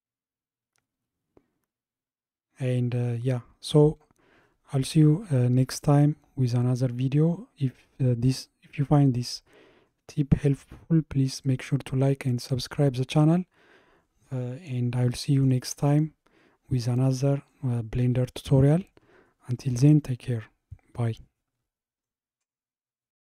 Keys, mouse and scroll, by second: 10.8-14.0 middle drag.